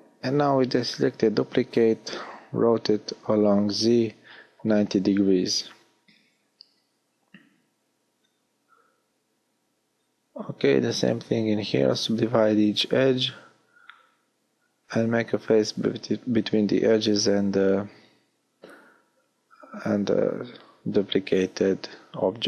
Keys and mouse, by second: 4.1-6.4 middle drag, 8.0 w, 9.8 w, 15.8 f, 18.6 f, 21.7 f.